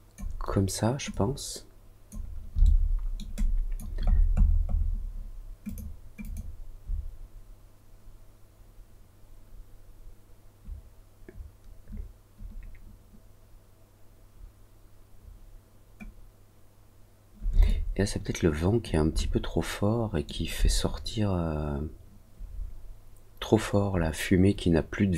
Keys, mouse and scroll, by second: 1.0 click, 2.6 alt+middle click, 3.3 alt+click, 4.0-4.8 scroll up 3, 5.6 click, 6.1 click, 17.6-18.8 alt+drag, 19.1-20.2 alt+middle drag.